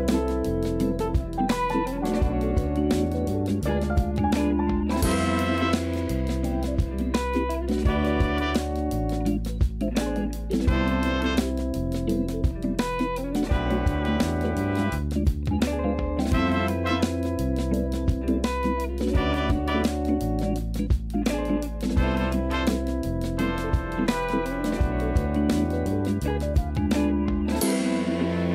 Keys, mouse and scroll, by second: 7.8-9.0 drag, 9.8 KP_1, 10.6 shift+a, 17.6 click, 18.7 click, 21.0 click, 22.0 click, 22.4-23.8 scroll up 1, 23.8 Tab, 24.3 s, 25.8-26.1 scroll up 1, 26.1 shift+middle click, 26.8 g.